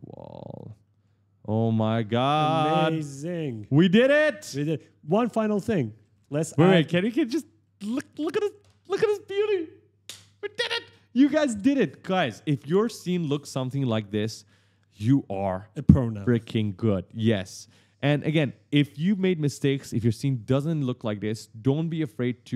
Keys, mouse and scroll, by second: 0.5 right click, 0.6 right click, 0.7 right click, 0.8 right click, 0.8 right click, 1.7-7.4 typing, 2.5 right click, 4.0 scroll up 1, 5.3 right click, 5.9 right click, 6.0 right click, 6.4 right click, 6.6 right click, 7.4 right click.